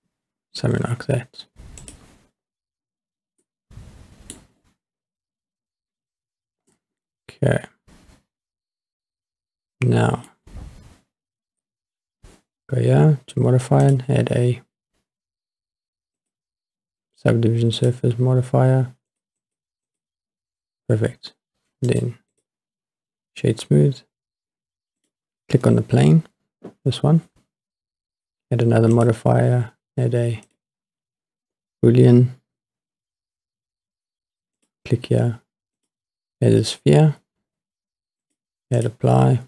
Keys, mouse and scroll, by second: 1.8 click, 2.4-3.4 scroll down 6, 3.4-4.5 middle drag, 4.5-5.4 scroll down 5, 6.7-10.3 middle drag, 10.6-13.2 scroll up 2, 13.8-16.4 drag, 17.7 click, 19.1 click, 19.4 click, 19.9 click, 21.9 right click, 25.0 click, 28.9-30.6 drag, 31.7-32.1 scroll down 2, 34.6-36.1 drag, 38.2-39.0 drag.